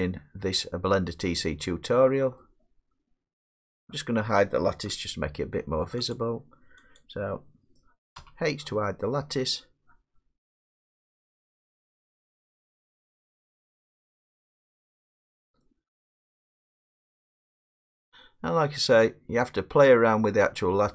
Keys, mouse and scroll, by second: 1.0 middle click, 2.1 middle click, 3.7 middle click, 4.9 Tab, 6.1 click, 7.0 click, 8.2 h, 9.3 middle click, 9.8 scroll, 11.8 middle click, 11.9 scroll up 6, 15.6 middle click.